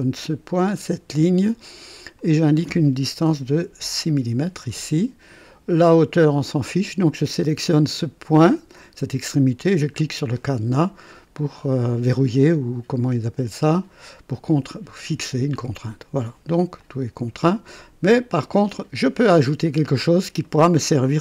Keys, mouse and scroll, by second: 0.5 click, 2.1 click, 3.3 KP_6, 3.6 Return, 6.4 click, 9.6 click, 15.5 click, 16.7 click, 18.4 click, 19.7-20.1 scroll up 1, 20.4 right click.